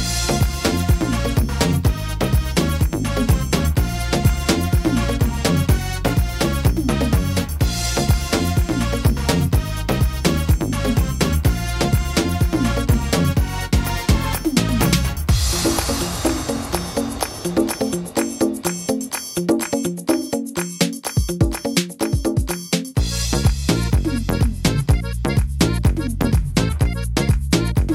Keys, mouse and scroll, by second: 0.7 click, 1.7 right click, 2.2 shift+right click, 3.8 click, 5.0 click, 6.5 middle click, 7.6 right click, 8.5 shift+right click, 9.2 click, 10.5 middle click, 12.1 right click, 12.5 shift+right click, 13.3 click, 15.1 middle click, 15.4 scroll down 2, 15.8 middle click, 16.4 scroll down 2, 16.8 middle click, 17.8 middle click, 18.2-18.7 scroll up 4, 18.7 middle click, 19.7 middle click, 20.4 middle click, 21.3 right click, 21.9 right click, 22.9 click, 24.6 scroll down 1, 24.8 middle click, 25.5 right click, 26.2 click, 26.9 middle click, 27.8 middle click.